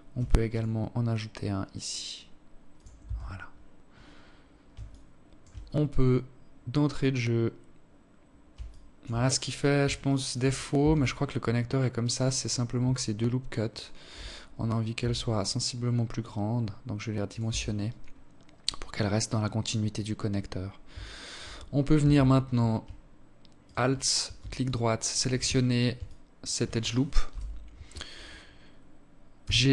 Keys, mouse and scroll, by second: 1.7 Tab, 2.1 scroll down 7, 3.6 alt+shift+click, 4.4-5.1 scroll up 1, 5.1 scroll up 2, 7.4 alt+shift+click, 8.0 scroll up 2, 8.2 scroll down 1, 8.3 scroll down 1, 8.8 alt+shift+click, 9.3 scroll up 1, 9.5 Tab, 11.0 alt+right click, 12.4 alt+shift+right click, 13.7 s, 16.2 Tab, 16.6 scroll down 8, 19.7 alt+shift+click, 20.3-21.2 scroll up 5, 20.7 Tab, 22.4 alt+right click, 23.4 alt+shift+click, 24.8 alt+click, 26.0 KP_7, 28.2 g.